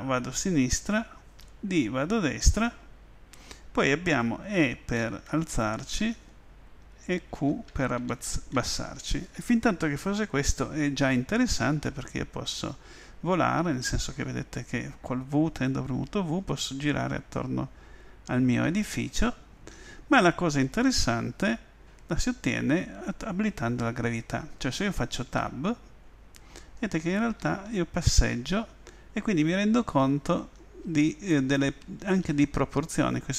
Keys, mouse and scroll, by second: 1.4-2.5 typing, 4.5 typing, 7.3 typing, 12.4 w, 15.5 w, 19.4-20.4 typing, 21.9 middle click, 28.0 w, 29.8 w, 30.3 w, 30.8 w, 31.8 w, 32.8 middle click.